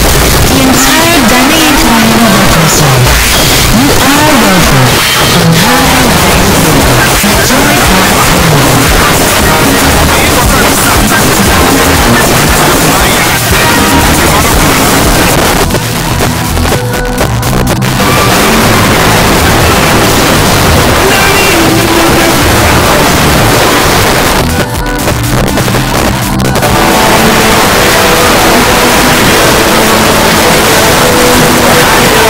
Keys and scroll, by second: 15.4 Page_Down, 24.0 Page_Down.